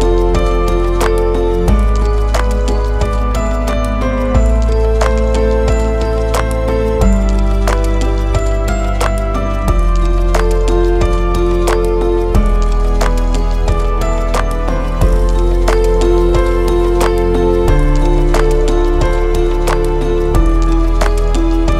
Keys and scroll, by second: 4.9 Return.